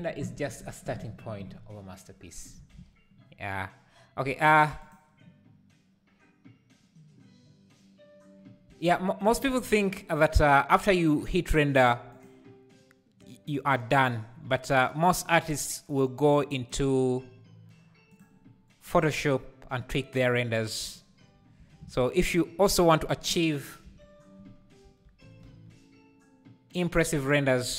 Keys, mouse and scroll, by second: 4.8 click, 12.1 drag, 13.5-16.4 drag, 18.8 click, 25.0 shift+d.